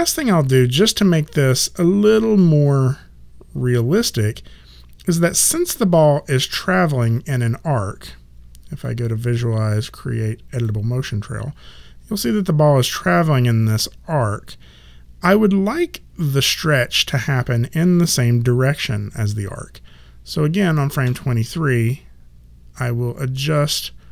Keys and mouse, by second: 1.4 click, 8.8 click, 16.4 click, 21.0 e, 23.5 click.